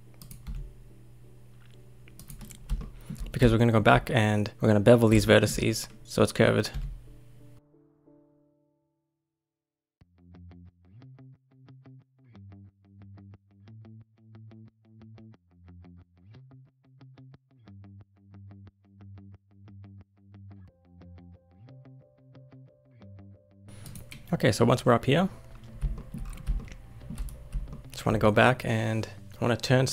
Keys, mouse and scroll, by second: 0.4 e, 2.8-6.7 shift+middle drag, 6.7 e, 8.2 e, 9.1 e, 9.5 shift+middle click, 9.7 scroll up 1, 9.8 shift+middle click, 10.2 e, 10.9 e, 12.8 e, 13.3 e, 14.0 e, 14.6 e, 15.3 click, 15.7 g, 16.3 click, 16.7 e, 18.6 e, 20.0 click, 20.4 g, 21.2 click, 21.3 e, 21.8 e, 22.3 e, 25.9 shift+middle click, 26.2-26.5 scroll down 4, 26.5 shift+middle click, 27.2-27.7 scroll down 1, 27.7 shift+middle click, 27.8-29.0 scroll up 1, 29.0 scroll up 1.